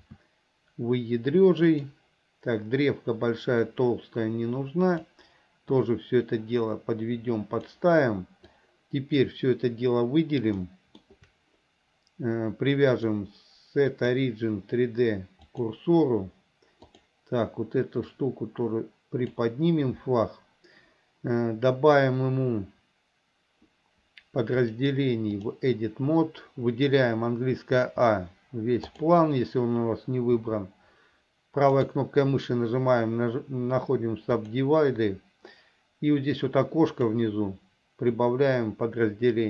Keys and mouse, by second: 0.1 s, 3.9-5.2 drag, 5.9-7.8 drag, 8.7 click, 10.8 shift+middle click, 13.2-15.8 drag, 18.4-19.5 drag, 24.7-25.7 drag, 27.9 a, 29.0 click, 30.5 a, 31.9-34.7 right drag, 38.2-39.4 drag.